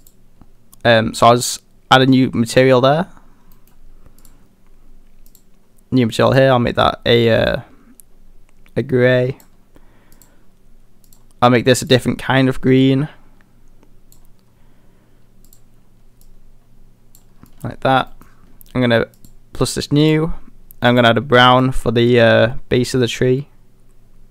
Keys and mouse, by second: 0.0 click, 3.6 middle click, 5.4 click, 10.2 click, 11.9 click, 15.5 click, 17.5 middle drag, 18.1 middle click, 19.2 click.